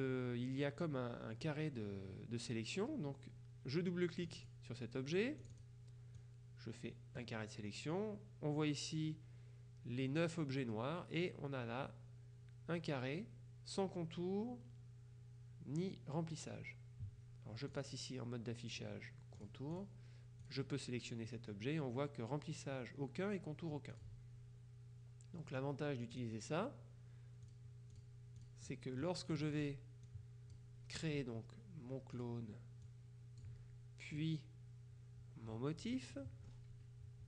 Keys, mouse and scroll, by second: 4.4 click, 5.5 click, 6.3-7.8 drag, 17.8 click, 19.5 click, 20.5 click, 24.0 click, 26.2 click, 27.5-29.0 drag, 29.4 click, 32.2 click, 32.9 click, 34.2 click, 36.0 click.